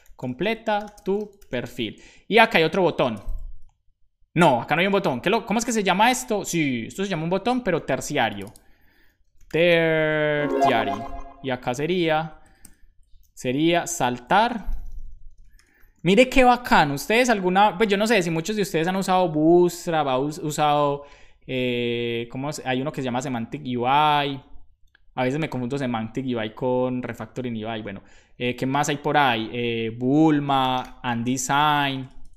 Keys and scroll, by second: 0.0-0.7 typing, 1.7 super+s, 2.0 super+Right, 3.1 Return, 9.1-11.1 typing, 11.1 Right, 11.3 Right, 12.1 alt+shift+Right, 13.5-17.0 typing, 30.2-31.6 typing.